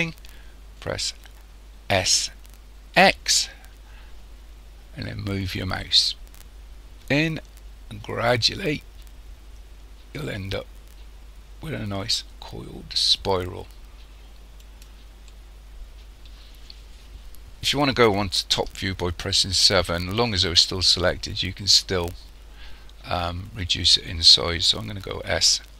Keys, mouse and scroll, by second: 2.0 s, 15.3 middle click, 19.1 KP_7, 20.2-21.7 scroll up 5, 21.7-22.3 scroll up 3, 25.3 s.